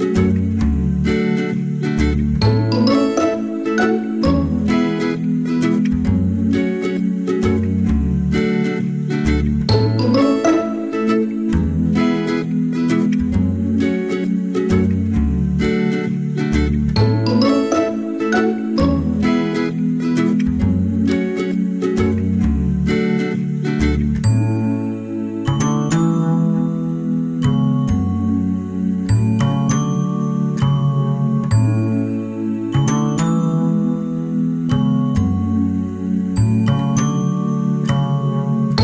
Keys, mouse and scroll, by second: 0.9 click, 6.2 middle click, 9.6 KP_1, 15.6 click, 17.0 click, 23.6 click, 26.3 ctrl+alt+shift+c, 31.7 middle click, 35.3-35.8 scroll up 1, 35.8 middle click, 36.8 click, 38.6 click.